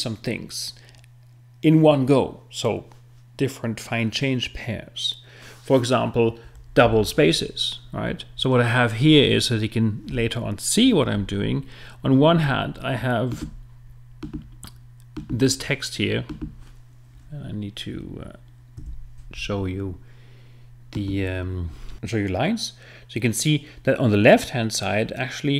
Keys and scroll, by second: 18.8 F7.